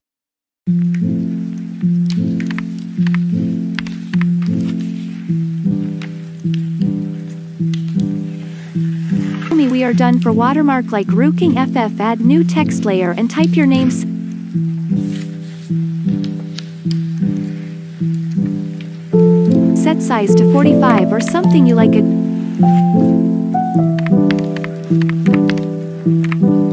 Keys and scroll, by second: 2.6 1, 3.7-4.1 typing, 20.9 4, 24.5-26.7 typing.